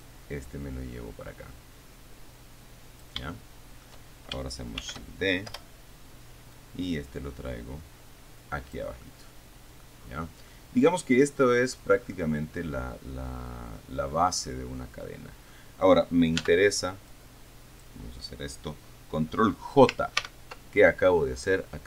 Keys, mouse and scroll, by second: 0.3-3.5 drag, 3.6 shift+middle click, 5.1 shift+d, 5.8 Return, 6.8-9.2 drag, 9.3-10.3 middle drag, 10.3-10.8 scroll down 1, 10.8-12.2 middle drag, 13.0 scroll down 1, 13.2-14.2 middle drag, 14.2-14.8 scroll up 1, 14.8-15.4 scroll down 2, 15.4 middle click, 16.7 b, 17.4-18.6 drag, 20.5 ctrl+j.